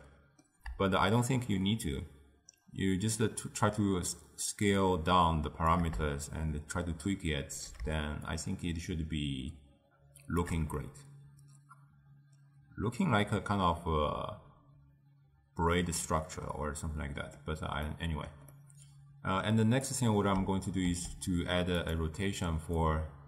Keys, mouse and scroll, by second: 1.4-4.5 shift+drag, 6.4-10.9 shift+drag, 10.9-13.9 middle drag, 18.0-20.0 middle drag, 20.0 click, 20.9 shift+d, 22.9-23.2 drag.